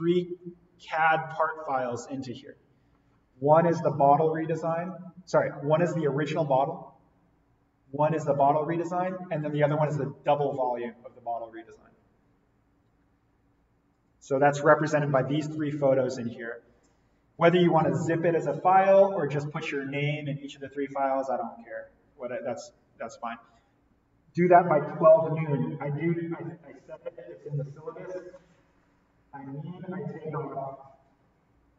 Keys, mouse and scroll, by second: 13.9 click.